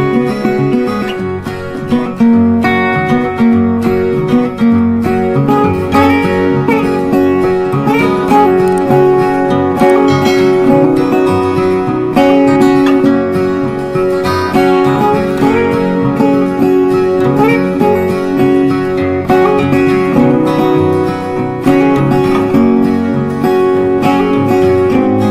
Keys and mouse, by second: 4.9 click, 6.2-20.3 drag, 20.3 shift+right click, 21.8 click.